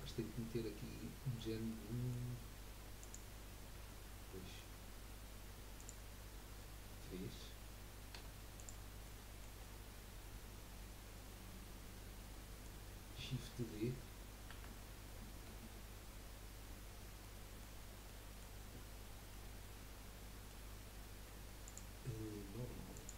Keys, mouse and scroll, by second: 0.0 middle click, 1.7 middle click, 2.3-2.8 scroll up 2, 3.0 click, 3.7 Tab, 4.3-5.8 middle drag, 5.8 click, 6.3-8.1 scroll down 2, 8.1 3, 8.5 click, 9.0-12.6 middle drag, 14.5 shift+d, 16.2-16.8 scroll up 2, 17.2-21.6 middle drag, 21.6-23.1 drag.